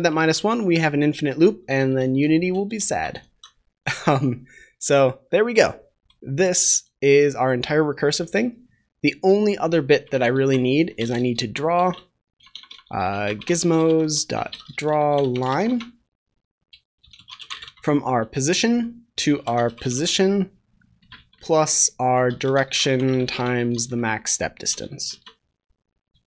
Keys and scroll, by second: 2.0 ctrl+s, 3.1 ctrl+s, 24.7 Return.